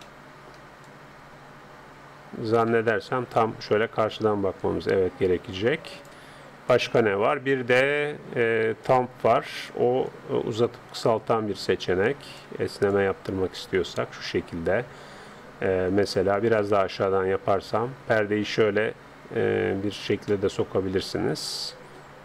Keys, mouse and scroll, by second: 0.2-2.4 middle drag, 3.0-4.6 middle drag, 4.0-5.8 drag, 6.7-8.4 drag, 9.8-11.6 drag, 14.5 click, 17.0-18.6 drag, 20.3-22.1 middle drag.